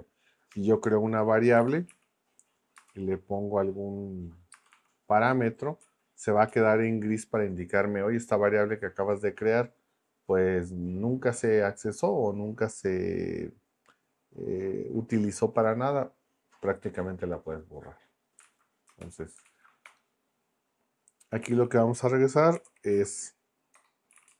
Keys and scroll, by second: 0.5 Return, 1.6 v, 1.9 r, 2.7 space, 2.9 =, 4.5 space, 4.7 4, 5.8 Down, 19.0 shift+Down, 19.4 shift+super+Right, 19.8 BackSpace, 21.2-24.3 typing.